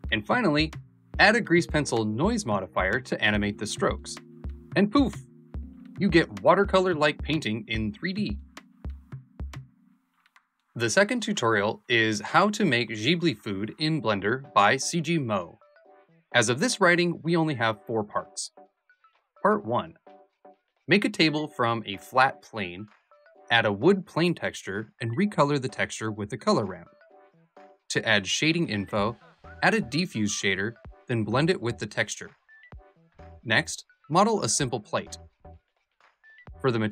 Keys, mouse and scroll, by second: 1.2-2.2 alt+middle drag, 2.2 ., 3.9-7.5 alt+drag.